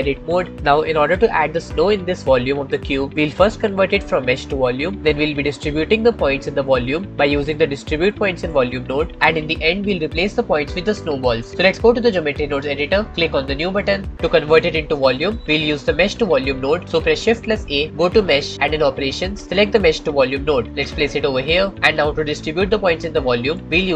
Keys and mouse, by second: 0.4 Tab, 17.6 shift+a.